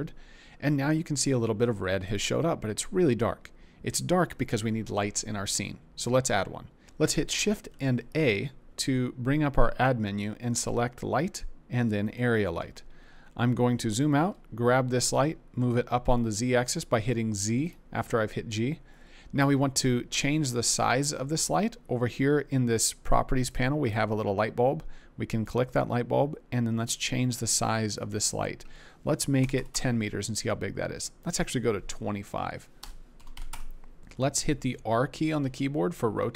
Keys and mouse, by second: 7.7 shift+a, 14.1 g, 15.1 z, 17.6 click, 23.8 click, 25.4 click, 27.9-29.7 drag, 31.2-33.5 drag, 35.4 r.